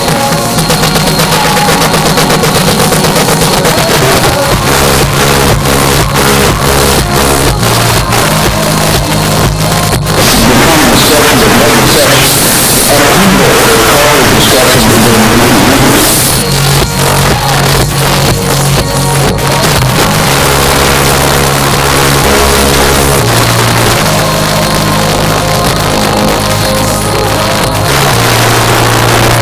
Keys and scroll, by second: 16.3 Page_Down.